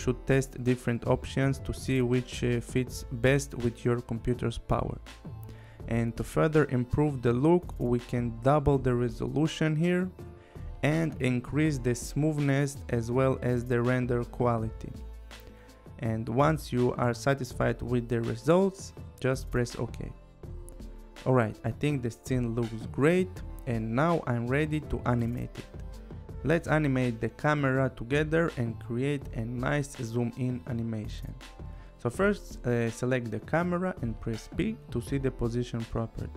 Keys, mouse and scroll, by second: 7.4 click, 9.2 click, 12.5 click, 19.8 click, 20.7 click, 22.8 click, 29.1 click, 31.4 click, 33.8 click, 35.3 p.